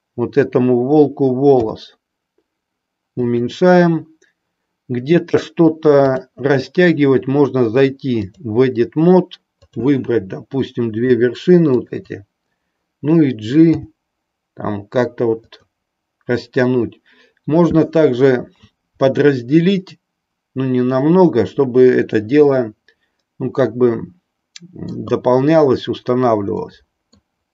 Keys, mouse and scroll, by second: 1.5 s, 5.9-8.5 drag, 9.6 click, 11.6 shift+click, 13.8 g, 15.5 click, 18.5 a, 22.4-25.0 middle drag, 26.5 middle click.